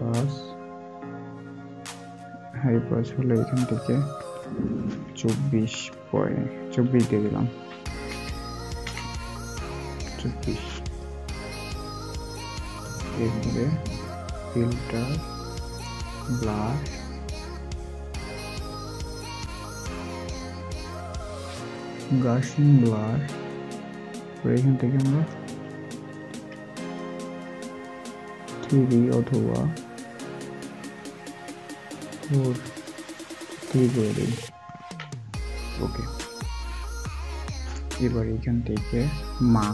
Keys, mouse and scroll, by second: 8.0 typing, 12.0 typing, 26.2 typing, 31.2 typing, 34.5-35.2 typing.